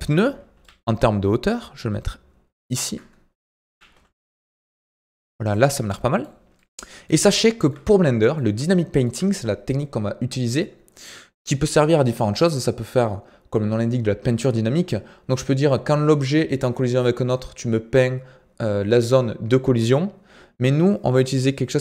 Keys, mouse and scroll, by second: 0.0 scroll up 2, 0.5 g, 3.6 g, 9.4-21.8 shift+middle drag.